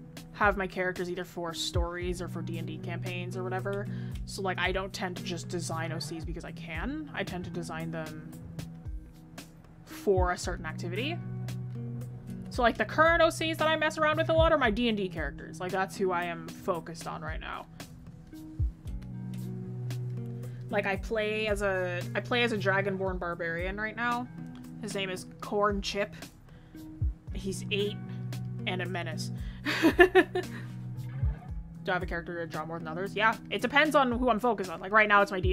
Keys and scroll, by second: 26.5 ctrl+z, 34.4 ctrl+z.